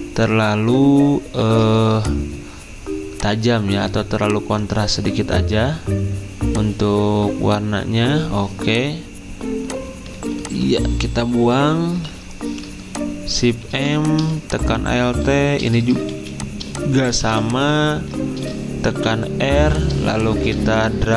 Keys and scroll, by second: 14.9 typing, 17.0-17.7 typing, 17.9 ctrl+z.